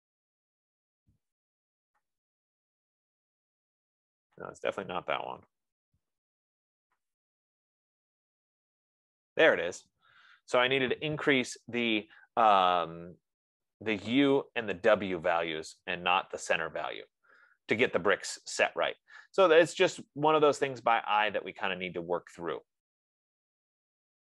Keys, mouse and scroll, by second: 0.0-0.2 typing, 2.7 click, 3.1-3.9 typing, 5.0 click, 5.5-6.6 typing, 7.5 click, 8.5-9.2 typing.